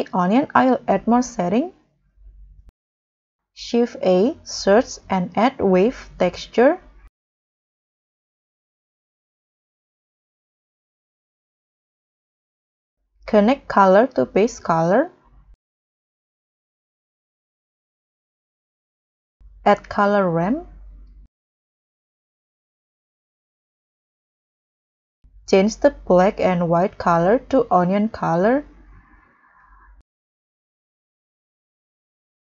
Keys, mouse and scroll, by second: 0.4-1.4 scroll down 13, 1.4 scroll, 1.4-1.9 scroll up 6, 1.9 scroll down 5, 2.1-3.2 scroll up 6, 3.4 scroll up 1, 3.6 shift+a, 4.7 a, 4.8 v, 5.0 e, 9.4-10.0 scroll down 10, 10.0-10.6 scroll up 9, 11.1-11.5 scroll up 1, 15.3-16.0 scroll down 9, 17.0-17.8 scroll up 8, 19.6 shift+a, 21.0 c, 21.1 o, 23.6-24.2 scroll down 11, 24.4-26.2 scroll up 15.